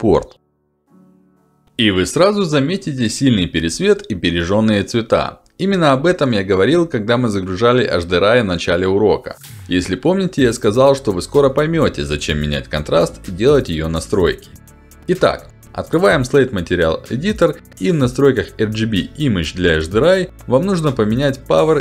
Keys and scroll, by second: 15.7 m.